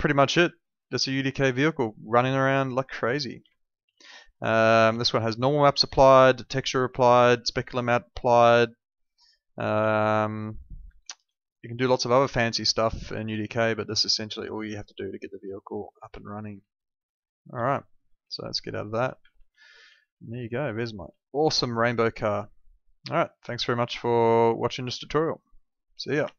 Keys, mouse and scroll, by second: 3.1-5.8 typing, 9.5-10.6 typing, 11.6 w, 13.2 d, 14.2 w, 15.5 a, 16.1 w, 17.5-21.7 typing.